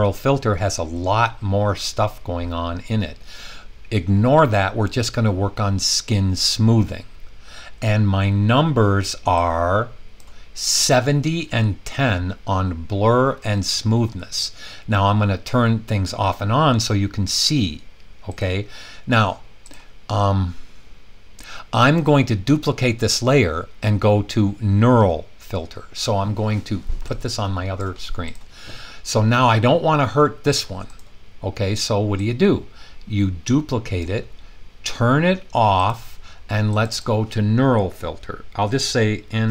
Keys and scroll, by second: 39.2-39.5 typing.